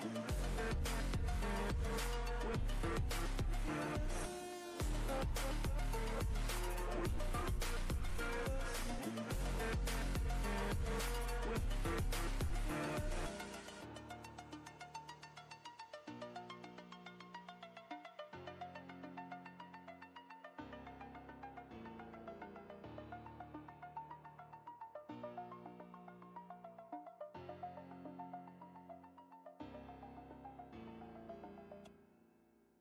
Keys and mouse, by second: 5.0-5.9 drag, 11.5 ctrl+space, 11.6-12.6 ctrl+drag, 12.1 ctrl+space, 15.0-16.0 alt+shift+drag, 16.3-17.0 ctrl+space, 17.0 space, 17.1-17.7 click, 17.5 space, 18.4 click, 20.4-22.0 typing, 25.8 0, 26.6 shift+5, 29.4 Return, 30.9-32.4 typing, 32.7 ctrl+Return.